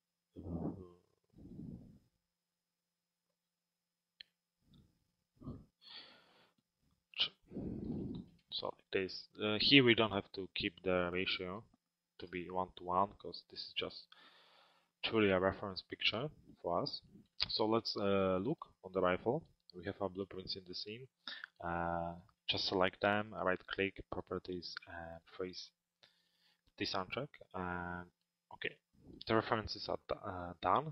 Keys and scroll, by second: 6.8 shift+Tab, 8.3 Return.